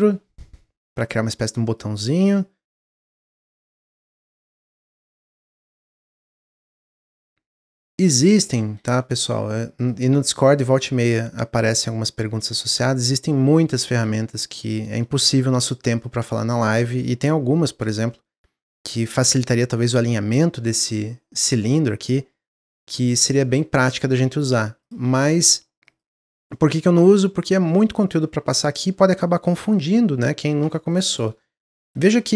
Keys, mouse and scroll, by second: 0.9 click, 2.3 click, 3.2 s, 4.5 click, 5.3-6.3 middle drag, 6.3 click, 7.6 click, 8.2-9.7 middle drag, 9.7 click, 10.2 middle click, 10.9 click, 13.2 click, 13.2-14.8 middle drag, 14.8 click, 15.2 middle click, 15.9 click, 16.9 s, 18.0 middle click, 18.3 scroll up 2, 18.6 middle click, 19.2 click, 22.1 click, 23.2-24.2 middle drag, 24.2 g, 26.4 middle click, 27.0 g, 29.1-31.4 middle drag, 31.4 scroll up 1.